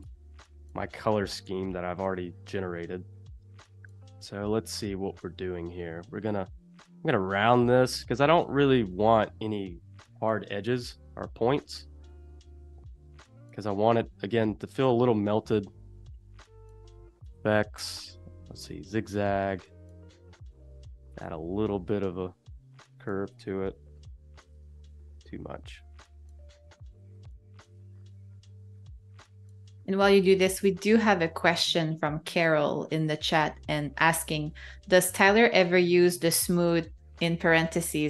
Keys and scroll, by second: 23.4 Up, 24.9 Down, 26.5 Up, 28.6 0, 32.7 z, 34.6 space, 35.2 a.